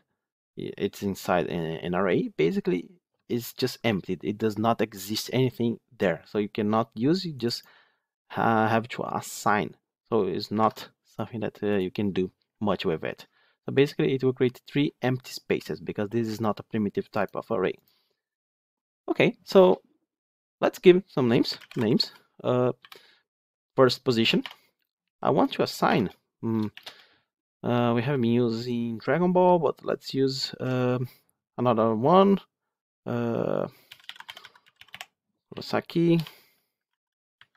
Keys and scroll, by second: 36.8 ctrl+d.